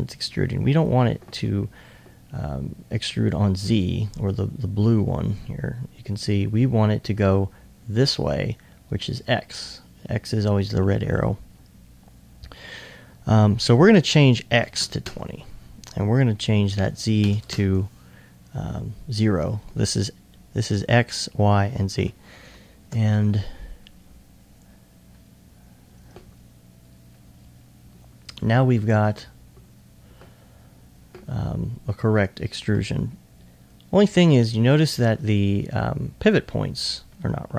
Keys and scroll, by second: 14.6 2, 17.2 ctrl+0.